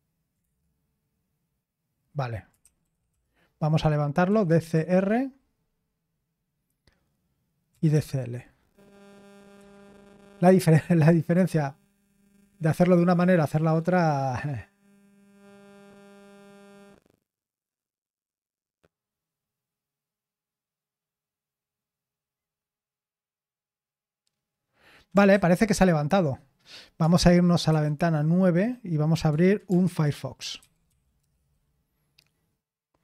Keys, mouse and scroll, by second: 0.4 Return, 2.3-5.2 typing, 7.4-8.5 typing, 9.5 Return, 25.3 ctrl+c, 27.6 super+9, 29.8 alt+space, 30.1-31.3 typing.